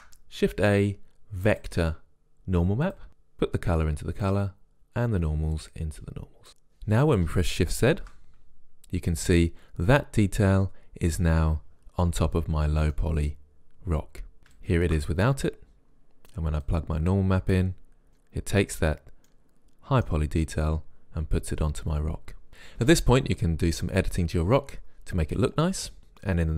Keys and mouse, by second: 0.0 shift+a, 4.3 click, 5.7 click, 8.1 shift+z, 13.0-14.6 middle drag, 14.6-16.5 drag, 16.7-18.1 drag, 18.5-19.8 middle drag, 20.5-23.6 middle drag.